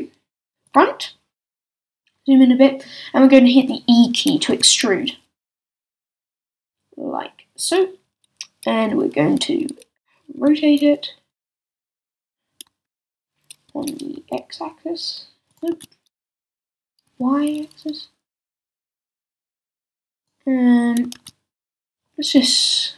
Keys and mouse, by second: 0.7-3.0 drag, 4.5 e, 7.7-10.4 drag, 10.4 r, 12.0 click, 12.8 z, 13.7 r, 15.7 z, 16.7 r, 21.1 super+z, 22.2 s.